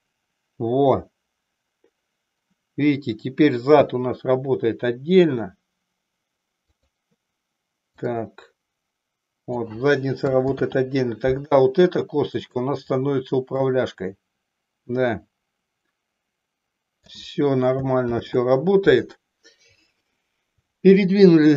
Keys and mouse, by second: 8.0-9.7 drag, 10.7 ctrl+z, 12.3 click, 13.6-17.2 drag, 18.4 ctrl+z.